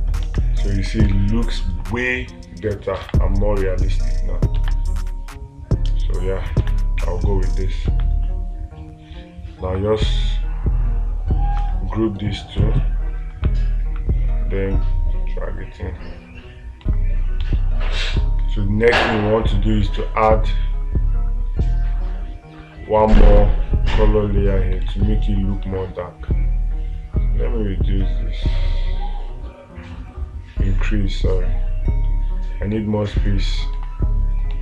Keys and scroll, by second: 1.5 space, 3.5 space, 7.1 space, 23.8 space, 25.3 space, 34.2 space.